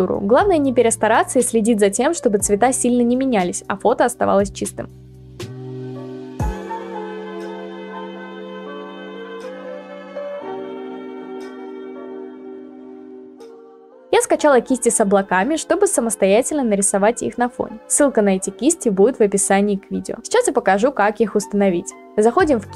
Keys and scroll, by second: 2.4 Return, 6.7-7.7 typing.